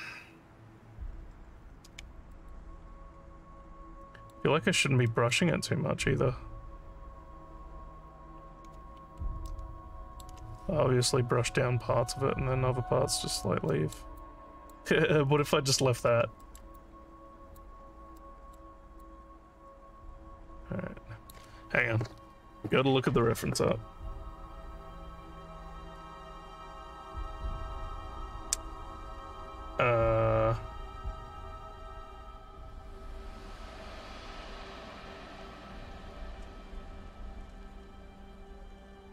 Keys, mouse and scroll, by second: 2.3 alt+middle click, 2.9 alt+scroll down 1, 3.7 alt+scroll down 1, 4.1 alt+middle click, 5.1 alt+middle click, 9.0 alt+scroll down 1, 9.5 alt+middle click, 13.7 alt+middle click, 14.2 alt+click, 16.4 alt+middle click, 16.8 alt+click, 17.8 scroll down 2, 18.2 alt+middle click, 19.0-21.3 alt+drag.